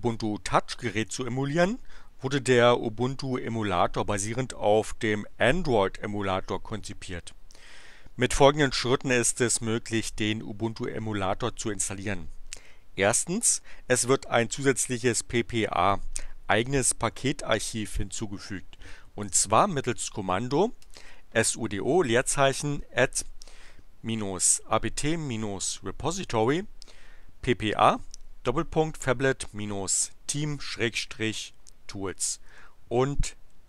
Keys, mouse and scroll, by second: 32.5 Return.